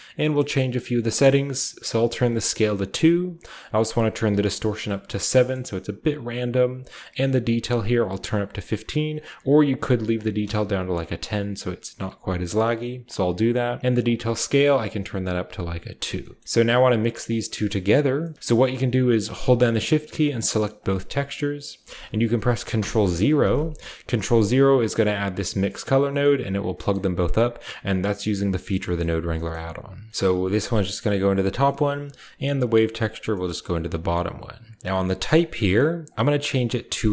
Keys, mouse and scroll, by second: 0.0 middle click, 0.3-1.8 scroll up 1, 0.7 middle click, 1.8 click, 1.8-3.1 scroll up 1, 2.0 2, 2.1 click, 3.7 click, 4.1 7, 4.2 click, 7.7 click, 9.0 click, 9.2-9.8 typing, 10.0 click, 12.9 scroll up 2, 13.9 click, 14.3 2, 14.4 click, 15.9-16.4 scroll down 1, 16.4-18.0 middle drag, 17.1 click, 19.2 click, 20.6 shift+click, 22.6 ctrl+0, 24.7-29.2 drag, 26.7 middle click, 26.7-28.4 scroll up 1, 28.4 scroll up 1, 29.3-31.4 shift+middle drag, 30.3-35.5 drag, 32.3-33.1 middle drag, 33.7-34.8 middle drag, 35.6-37.1 scroll up 1, 35.6-37.1 middle drag, 35.9-37.1 drag.